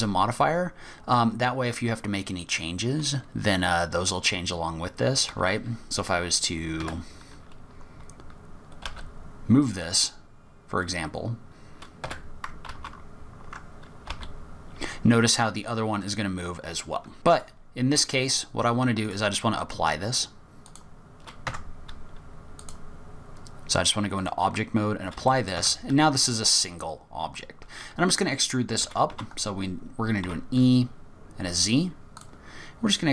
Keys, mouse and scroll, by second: 0.2-0.9 scroll down 5, 1.2-1.6 scroll up 2, 5.5 s, 8.0-8.8 scroll up 3, 8.8 g, 12.7 ctrl+z, 14.1 g, 17.9-19.0 scroll down 2, 19.0 click, 21.5 Tab, 22.6 click, 24.8-25.2 scroll up 2, 25.3 middle click, 25.6 Tab, 26.3-26.7 scroll down 3, 27.3-28.3 scroll down 10, 28.8 e, 32.5-33.0 scroll down 5.